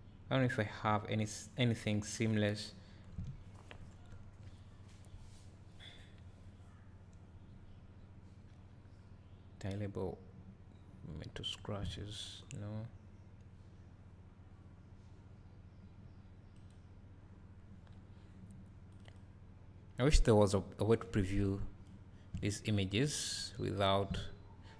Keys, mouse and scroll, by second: 12.0 scroll down 1.